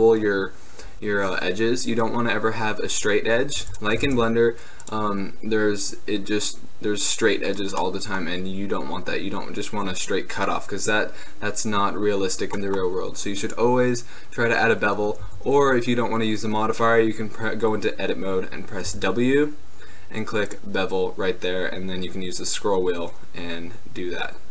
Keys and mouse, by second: 3.7 x, 4.2 shift+a, 5.4 middle drag, 13.6-15.0 drag, 15.4 Tab, 18.9 w.